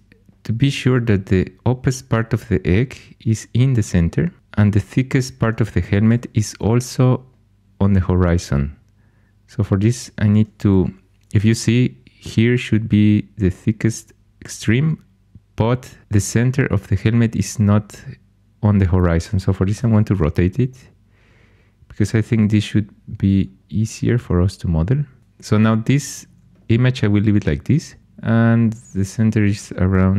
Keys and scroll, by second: 6.0 r, 10.7 ⟲, 19.7 r, 22.2-23.0 typing, 29.9 g.